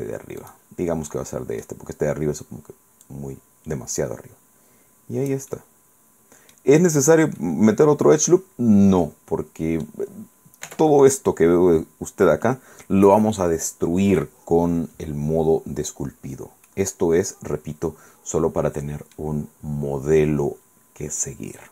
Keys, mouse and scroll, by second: 0.5 right click, 1.2 middle click, 3.1-5.6 drag, 5.6-6.9 middle drag, 6.9-7.5 scroll down 2, 7.5-10.1 middle drag, 10.8 Tab, 16.4 scroll down 1, 16.8-18.9 drag, 18.9 middle click, 19.9-20.2 scroll down 2, 20.2-20.5 scroll up 2, 21.4-21.7 scroll down 2.